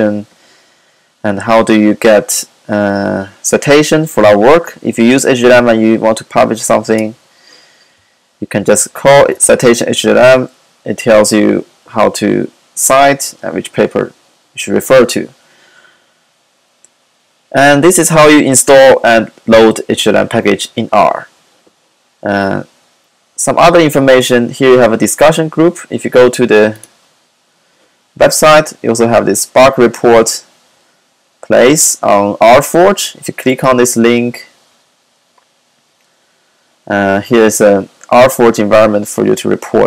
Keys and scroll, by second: 8.7 super+c, 8.9 super+v.